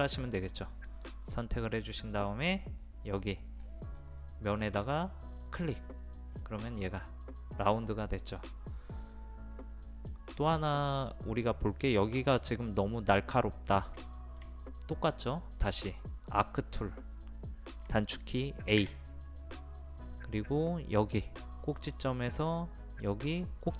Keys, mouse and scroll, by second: 0.7 click, 3.6 scroll up 1, 5.5 click, 6.3-6.7 scroll down 1, 8.5 middle click, 10.5 scroll up 1, 14.1-17.3 shift+middle drag, 18.8 a, 19.8-21.3 scroll up 1, 21.8 click.